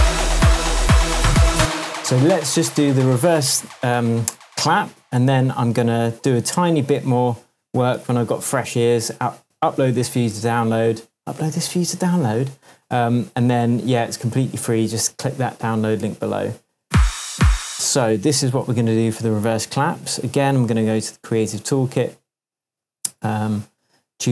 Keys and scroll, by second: 1.5 space, 2.1 super+s, 8.0 super+s, 16.8 space, 18.4 super+space, 18.5 super+t, 22.8 Up, 23.3 Right.